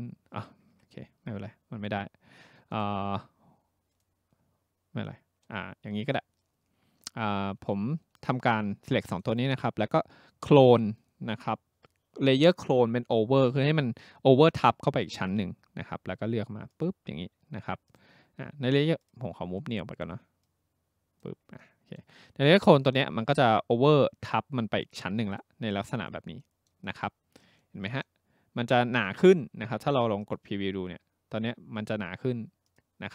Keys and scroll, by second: 0.6 Escape, 0.7 Escape.